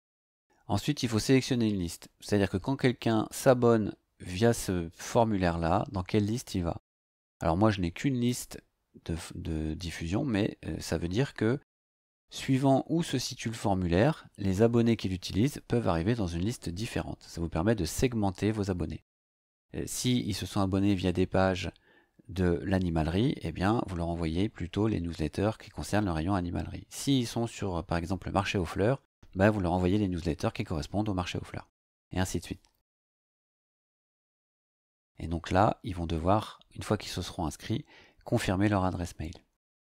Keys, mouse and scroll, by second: 6.9 click, 8.2 click, 35.2 scroll down 2.